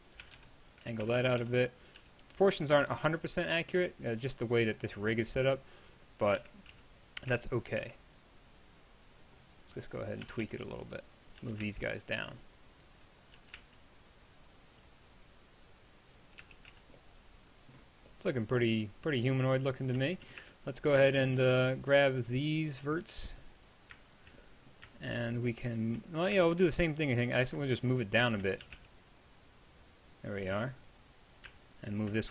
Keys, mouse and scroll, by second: 0.0-2.8 typing, 3.8 Tab, 6.4 KP_1, 6.7 z, 10.3 a, 10.4 b, 11.4 g, 16.4 Tab, 16.7 z, 19.9 middle click, 20.4 Tab, 23.9-26.5 middle drag, 26.5 ctrl+Tab, 28.7 g.